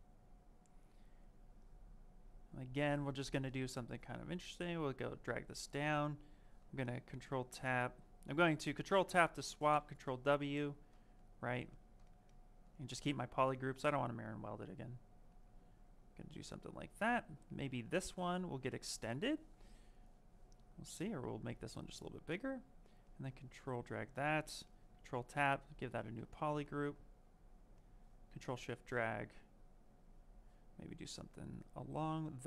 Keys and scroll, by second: 12.6 w.